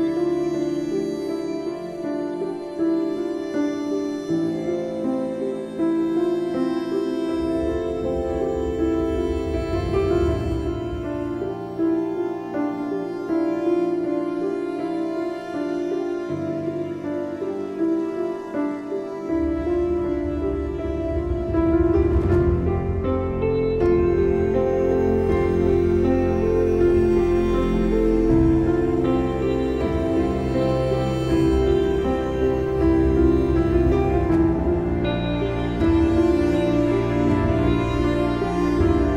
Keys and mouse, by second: 0.1 click, 0.6 space, 0.8 click, 1.0 space, 1.2 click, 1.2 space, 1.8 space, 3.9 click, 4.9 click, 6.5 click, 6.8 space, 6.9 click, 7.2 space, 7.6 click, 7.7 space, 9.1 space, 9.2 click, 9.5 space, 9.6 click, 9.7 space, 10.8 click, 13.1 alt+click, 14.7 click, 21.6 click, 24.7 click, 27.1-27.8 typing, 27.3 click, 27.4 click, 29.0 click, 29.9 click, 30.5 click, 31.8 click, 33.0 click, 33.7 click, 36.4 click, 38.3 click, 39.0 click.